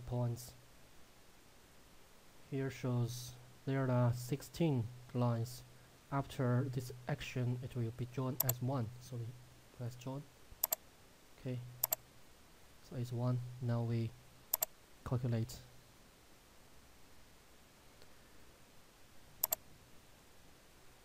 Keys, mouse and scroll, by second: 8.6 click, 19.9 click.